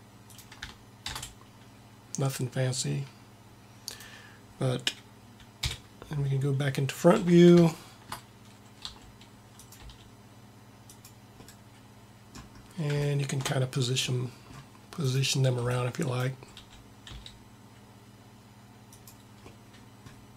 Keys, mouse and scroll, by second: 1.0 shift+d, 5.7 KP_1, 7.2 t, 8.8 r, 9.8 g, 15.0-17.1 drag, 16.2 b, 17.1 g.